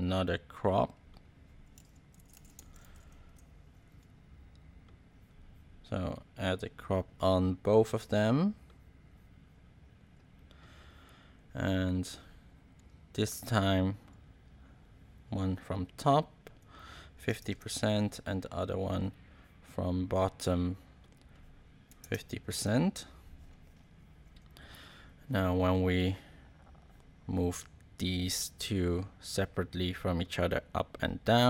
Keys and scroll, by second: 1.8-3.3 typing, 16.9-17.7 typing, 21.6-22.5 typing.